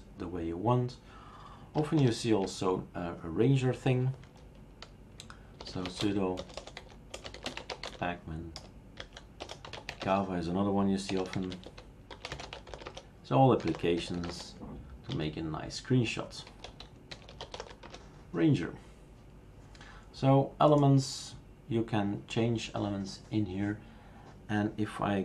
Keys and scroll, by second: 2.0 super+Return, 5.4-14.7 typing, 15.1 Return, 16.2-18.0 typing.